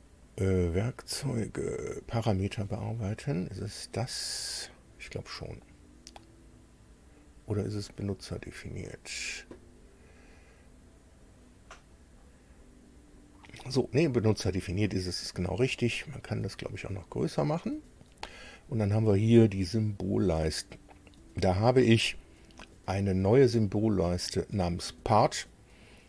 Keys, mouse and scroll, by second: 8.4 click, 15.1 click, 16.9-18.4 drag, 19.5 click.